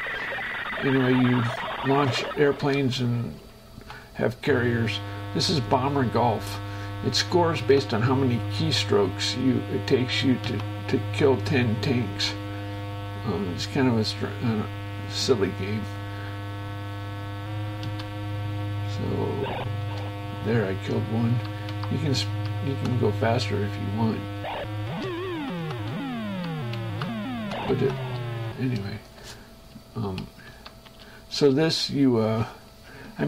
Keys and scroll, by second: 2.5 shift+Escape, 3.6 Right, 5.0 space, 7.9 Right, 8.9 Right, 19.4 Left, 20.0 space, 21.8 Left, 21.9 Up, 23.0 Right, 25.1 space, 25.4 Right, 26.1 Left, 27.0 Up, 27.4 Right, 28.1 space, 29.3 shift+Escape, 30.1 Right, 30.8 Left, 31.1 space.